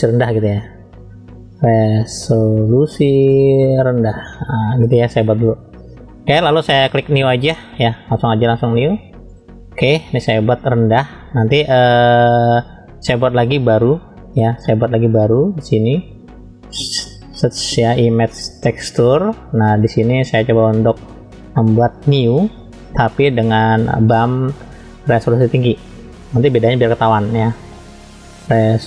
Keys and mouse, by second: 0.1 BackSpace, 0.5 BackSpace, 6.5-9.4 drag, 13.4 click, 14.2 click, 16.6 shift+a, 20.2 middle click, 21.7 middle click, 22.6-23.6 drag.